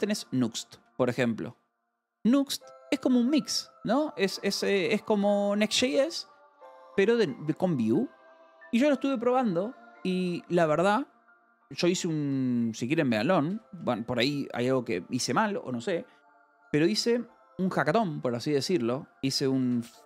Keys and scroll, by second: 0.7 Escape, 5.1 a, 5.6 space, 8.2 BackSpace, 11.7 Escape, 12.1 BackSpace, 13.1 v, 13.4 c, 13.7 BackSpace, 19.5-20.0 typing.